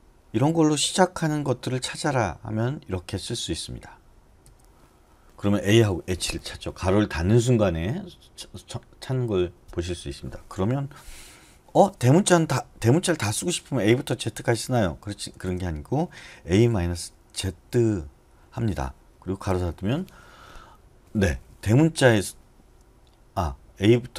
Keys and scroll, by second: 4.4 ], 15.2 BackSpace, 15.4 BackSpace, 16.5-17.5 typing, 19.3-20.0 typing.